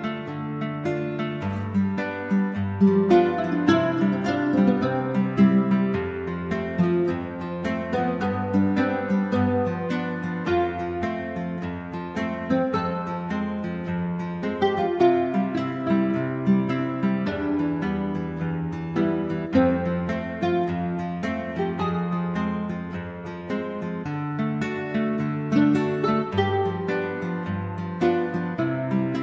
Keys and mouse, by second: 3.7 KP_5, 3.8 KP_3, 5.2 click, 5.6-7.2 typing, 5.9-6.4 drag, 8.5-10.4 typing, 10.0 click, 10.9 click, 12.4 a, 12.4 g, 13.3 click, 13.9 r, 14.1 g, 14.5-14.9 drag, 15.2 r, 15.3 g, 15.6 click, 15.8 g, 16.2 drag, 17.2-20.7 typing, 17.6 drag, 18.3 click, 19.6 click, 20.3 click, 20.9 click, 22.4 shift+d, 23.5-25.1 drag, 25.4 r, 25.6 g, 25.8 drag, 26.2-27.6 drag, 28.1 a, 28.1 g, 28.8 ctrl+z, 29.0 ctrl+z.